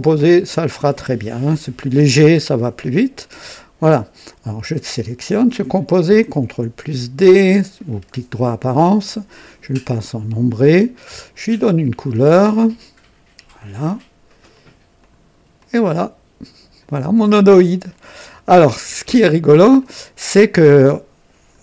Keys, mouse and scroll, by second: 1.2-3.0 drag, 3.1-4.1 drag, 4.9 click, 6.4 ctrl+d, 9.0 click, 10.0 click, 11.2 click, 12.6 click, 13.5 click, 14.5 click, 15.0 click, 15.5-17.0 drag, 17.1-18.5 drag, 18.7 scroll up 1, 19.1-19.7 right drag, 19.7-21.6 drag.